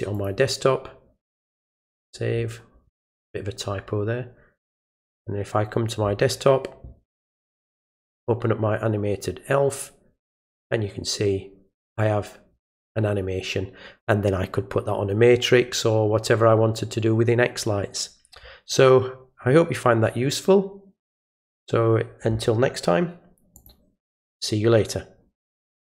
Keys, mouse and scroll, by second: 0.1 click, 1.6 click, 4.9 click, 7.6 click, 7.8 click, 23.6 click, 25.8 click.